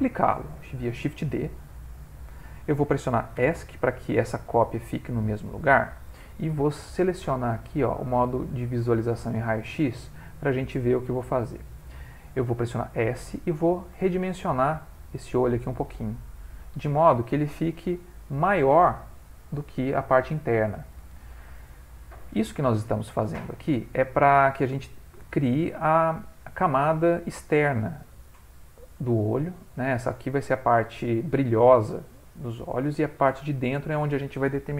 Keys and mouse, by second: 1.0 shift+d, 4.8 ctrl+middle click, 7.9 click, 12.9 s, 17.3 ctrl+middle click, 17.5 ctrl+middle click, 18.2 ctrl+middle click, 20.7 ctrl+middle click, 21.8 middle click, 24.0 ctrl+middle click.